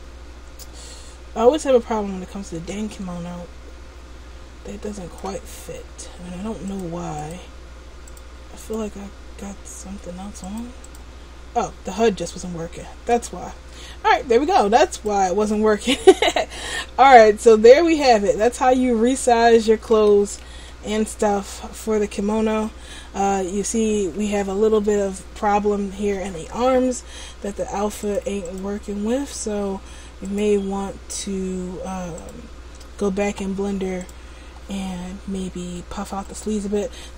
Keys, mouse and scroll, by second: 35.5 middle click, 36.4 right click.